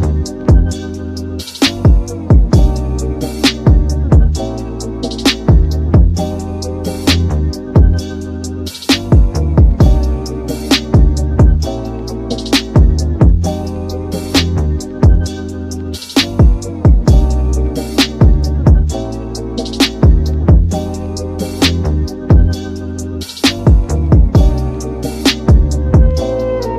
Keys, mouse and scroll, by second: 2.7 click, 3.6-5.1 drag, 5.1 z, 6.8-7.1 scroll up 5, 7.5 scroll down 2, 7.9-11.0 middle drag, 11.0 click, 14.7 click, 15.8-16.6 drag, 19.5 click, 20.3 click, 25.3-25.6 scroll down 3, 25.6-26.7 middle drag.